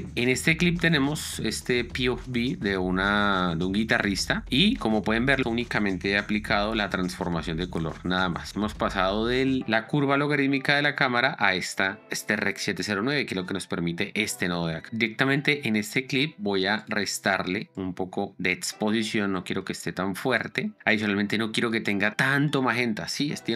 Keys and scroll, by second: 6.6 ctrl+d, 11.4 ctrl+d.